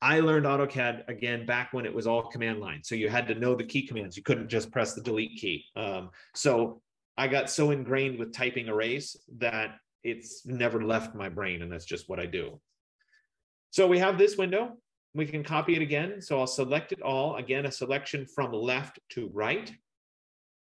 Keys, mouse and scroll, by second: 1.2 F15, 15.8 click, 17.9 click.